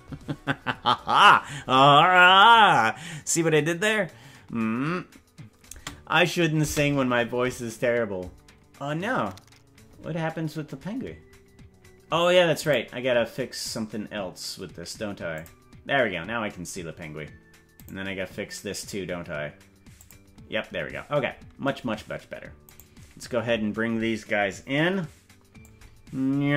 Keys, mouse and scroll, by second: 5.8 space, 6.8 space, 12.8 right click, 15.4 click, 16.8-17.2 scroll down 3, 18.0 right click, 20.0 click, 21.0-21.6 scroll up 4, 22.8 right click, 24.2 scroll down 1, 25.6-26.5 drag.